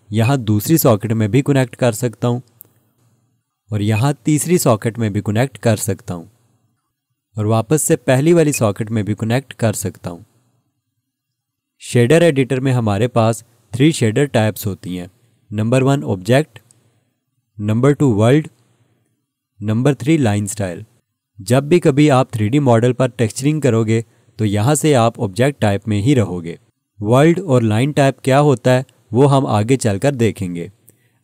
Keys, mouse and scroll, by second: 0.2 click, 8.5 click, 15.7 click.